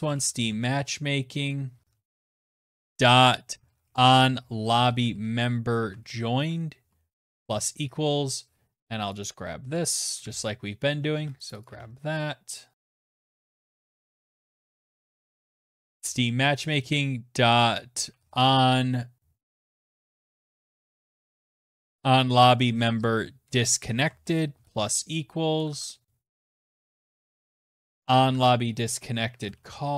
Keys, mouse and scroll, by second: 0.0-6.5 typing, 8.0-8.7 typing, 8.2 click, 8.3 click, 8.8 ctrl+v, 9.4 ctrl+z, 10.3 ctrl+c, 10.6 click, 10.7 click, 10.8 ctrl+v, 12.0 click, 12.5-15.7 typing, 12.7 click, 16.9-17.7 typing, 19.7-21.2 typing, 21.9 Down, 22.1 Down, 22.5 Return, 23.8 =, 24.6 BackSpace, 24.8 BackSpace, 25.4 =, 26.3 click, 26.3 click, 26.8 ctrl+c, 27.0 click, 27.3 ctrl+v, 28.2-29.9 typing.